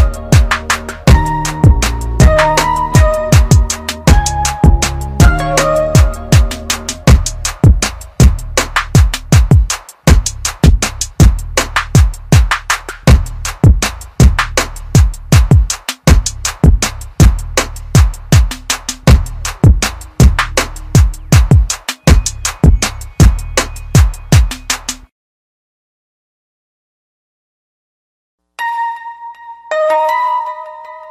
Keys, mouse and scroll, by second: 1.0 alt+click, 2.3 click, 11.6 click, 17.8 click, 19.3 ctrl+z, 20.5 click, 25.5 click.